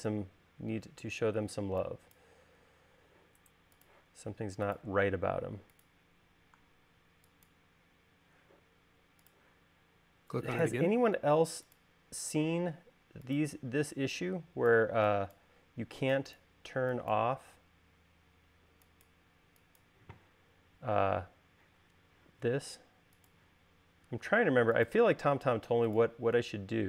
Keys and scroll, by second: 7.7 e, 14.5 e.